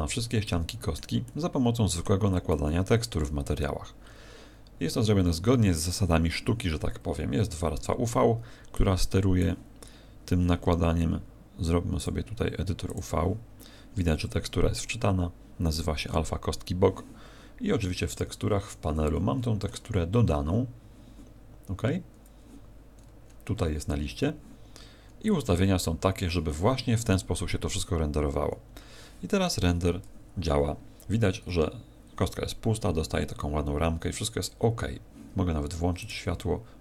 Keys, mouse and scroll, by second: 0.4 middle click, 1.2 middle click, 2.5 middle click, 8.7 click.